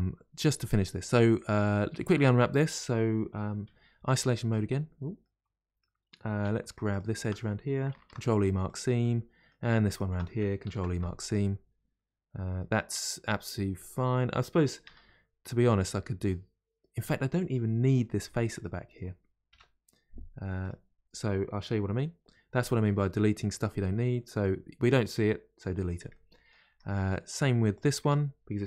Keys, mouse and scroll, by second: 0.4-1.1 scroll up 1, 1.1-3.6 middle drag, 3.6 KP_Divide, 4.8-5.2 scroll down 3, 12.7-21.9 middle drag, 21.9 KP_Divide, 22.6-26.7 middle drag, 26.7 Tab, 26.9-28.6 middle drag.